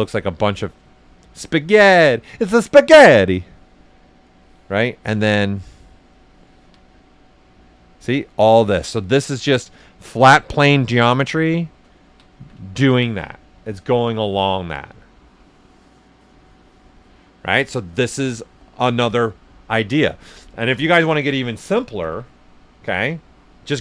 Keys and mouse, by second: 0.6 typing, 1.3-3.3 right drag, 3.3 click, 4.8 ctrl+right click, 5.4 click, 6.5 alt+right click, 6.8-8.1 right drag, 7.1-8.1 typing, 8.7 click, 9.7-11.4 right drag, 11.6 shift+r, 11.9 ctrl+right click, 22.1-23.3 typing, 23.7 click.